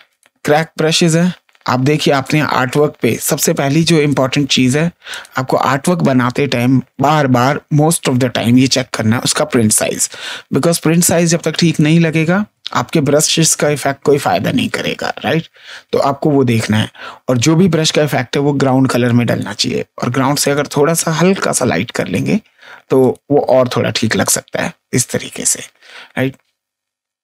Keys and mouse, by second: 0.0 click, 2.1 click, 3.3 ctrl+space, 3.5 ctrl+click, 3.9 ctrl+right click, 5.0 ctrl+click, 9.3 space, 9.6 right click, 10.8 ctrl+space, 10.8 click, 11.3 click, 11.7 click, 13.2 click, 14.8 ctrl+z, 18.6 alt+click, 20.3 click, 21.9 click, 24.0 click.